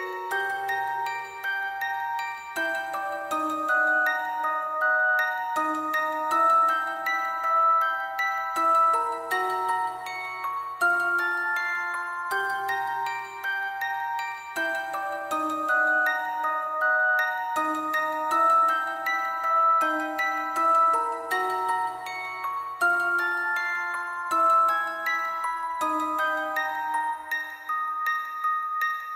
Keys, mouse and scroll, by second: 2.4 right click, 3.4 right click, 3.7 Delete, 4.4 Delete, 5.5 alt+scroll down 1, 5.9 alt+scroll up 1, 6.1 alt+scroll down 1, 8.3 double click, 8.8-9.4 typing, 9.6 Return, 10.0 Return, 11.4 double click, 15.2 alt+click, 15.5 ctrl+z, 16.2 alt+click, 16.3 alt+click, 16.4 alt+click, 17.3 alt+click, 17.4 alt+click, 17.9 alt+click, 18.5 alt+click, 18.9 alt+click, 19.6 alt+click, 20.7 alt+click, 21.2 alt+click, 21.7 alt+click, 21.8 alt+click, 22.2 double click, 22.4 alt+click, 22.5 alt+click, 23.0 shift+click, 23.1 alt+click, 25.6 [, 25.7 [, 26.0 alt+click, 26.1 alt+click, 26.6 double click, 27.9 double click, 28.5 double click.